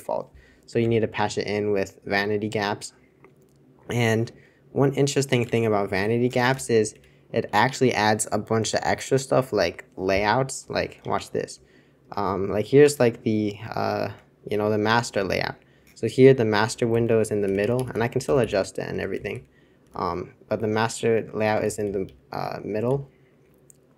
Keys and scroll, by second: 5.5 super+1, 6.5 super+c, 6.9 super+c, 11.1 super+Return, 12.0 super+Return, 14.0 alt+super+4, 16.6 super+l, 16.9 super+l, 17.4 super+h, 17.5 super+h, 17.7 super+h, 17.9 super+h, 18.2 super+l, 18.4 super+l, 18.9 super+h, 19.1 super+l, 19.8 super+h, 20.7 super+c, 21.6 super+j, 22.4 super+j.